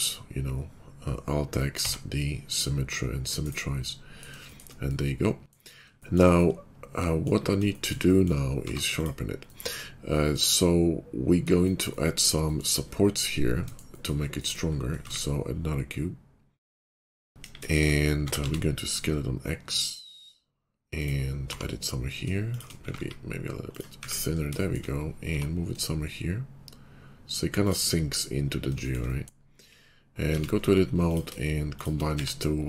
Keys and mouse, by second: 4.6-5.8 middle drag, 6.1-17.3 middle drag, 8.6 q, 15.0 shift+a, 17.3 KP_5, 18.2 s, 21.2 middle click, 21.4 g, 22.2 shift+middle click, 22.7 s, 23.8-30.2 middle drag, 23.8 `, 25.2 g, 29.7 /, 30.2 Tab, 31.0 click, 31.6 shift+right click, 32.1 1.